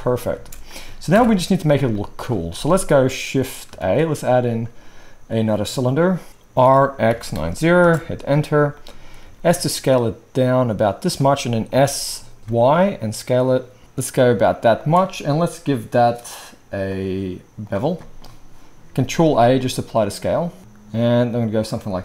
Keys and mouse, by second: 0.3 space, 1.1 shift+Left, 3.8 shift+a, 6.6 r, 9.2 s, 11.2-17.0 middle drag, 11.7 s, 12.4 s, 17.0-22.0 drag, 19.1 ctrl+a.